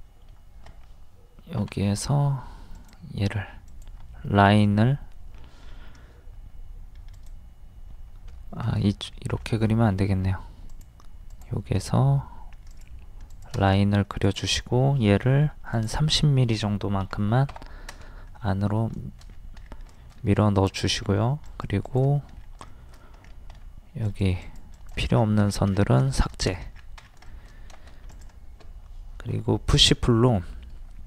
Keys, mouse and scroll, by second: 2.7 click, 4.3 Escape, 7.2 click, 8.5 Escape, 9.2 ctrl+z, 10.7 click, 11.9 Escape, 12.7 click, 13.8 middle click, 14.2 click, 15.5 d, 15.8 click, 17.0 KP_3, 17.4 KP_0, 18.3 scroll up 1, 18.4 middle click, 19.0 shift+middle click, 19.3 scroll down 1, 20.1 shift+middle click, 20.4 scroll up 1, 21.1 scroll up 1, 21.4 click, 22.4 scroll down 1, 22.7 shift+middle click, 23.2 scroll up 1, 24.1 click, 25.2-25.5 scroll down 1, 26.6 shift+middle click, 26.7 scroll up 1, 26.7-27.1 scroll down 1, 27.3 shift+middle click, 28.1 click, 29.3 d, 29.7 click.